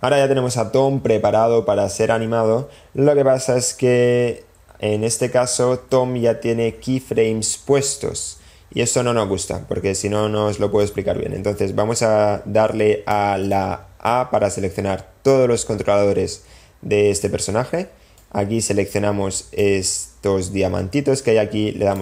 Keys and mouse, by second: 5.8 a, 10.8-13.2 drag, 13.4 click, 14.1 a, 18.1-19.7 drag.